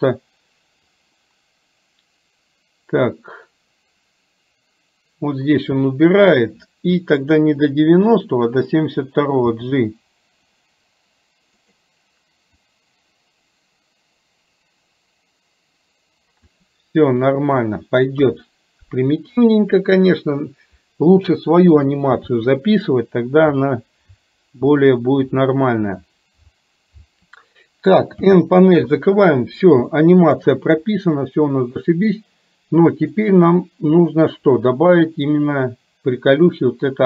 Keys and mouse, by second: 1.0-7.4 drag, 9.6 g, 12.7-16.6 drag, 18.4 KP_1, 28.2 n, 30.0 shift+middle click, 32.2-33.2 middle drag, 34.5-37.0 drag.